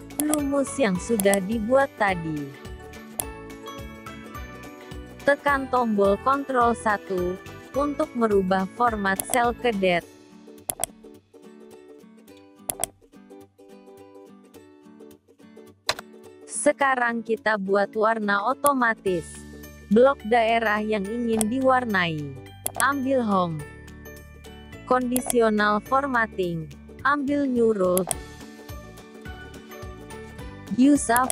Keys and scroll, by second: 5.3 ctrl+1.